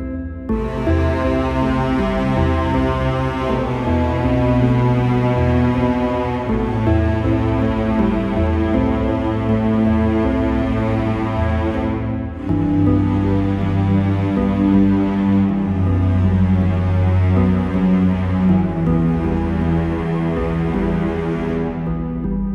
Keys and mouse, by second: 0.1 KP_0, 5.3-7.4 drag, 10.6 click, 13.8-17.3 drag, 17.5 click, 17.8 click, 20.1 KP_0.